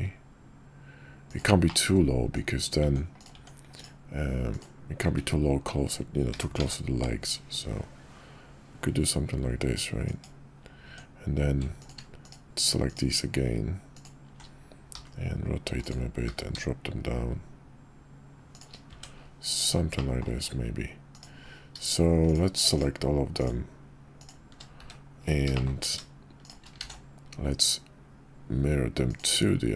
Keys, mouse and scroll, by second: 1.7 click, 2.2 Tab, 5.0 `, 6.3 g, 10.8 Tab, 13.9 alt+shift+click, 14.9 r, 16.2 g, 18.9 Tab, 19.9-20.2 middle drag, 25.5 shift+click, 26.8 alt+x.